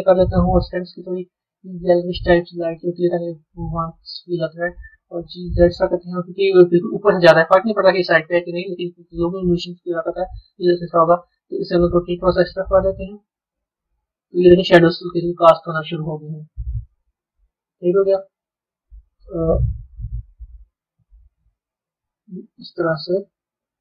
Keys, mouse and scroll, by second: 3.2-4.9 middle drag, 4.9 g, 8.7-11.5 middle drag, 11.5 r, 15.0-19.4 middle drag, 19.4 KP_7, 21.2 r.